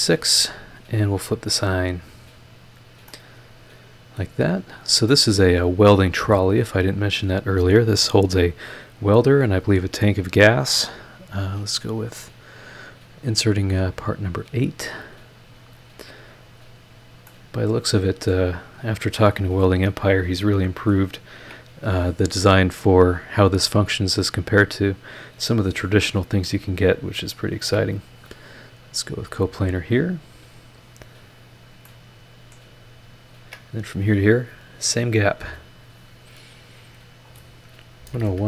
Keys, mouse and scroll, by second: 1.4 click, 2.6 click, 3.1-4.4 middle drag, 5.1-6.1 middle drag, 6.5 scroll up 1, 7.1 scroll up 1, 13.6 click, 15.5 click, 16.8 click, 17.2 scroll up 1, 17.3-18.5 middle drag, 19.0 click, 19.4 scroll down 1, 19.8-21.1 middle drag, 21.4 ctrl+click, 23.9 click, 25.5 click, 26.5 click, 27.6 ctrl+click, 29.1 click, 30.7 click, 31.5 click, 31.9-32.7 middle drag, 33.3 ctrl+click, 35.5 click, 37.0 click, 38.0-38.4 typing.